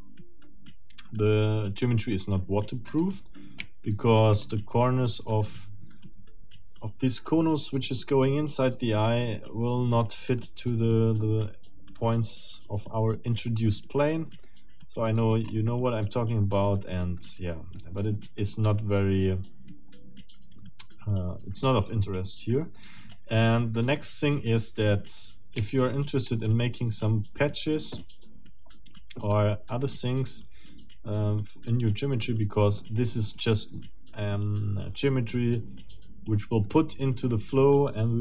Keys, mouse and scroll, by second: 2.9-3.2 scroll up 1, 3.6 shift+middle click, 4.5 shift+scroll up 2, 10.3 click, 13.3-13.6 scroll down 2, 14.4 click, 14.7 middle click, 15.5 scroll up 2, 16.1-17.4 middle drag, 17.5 scroll down 2, 17.7-22.9 middle drag, 23.1 middle click, 24.0-25.3 middle drag, 25.7 shift+middle click, 26.4-27.5 shift+middle drag, 29.3-33.0 middle drag, 35.3-36.8 middle drag.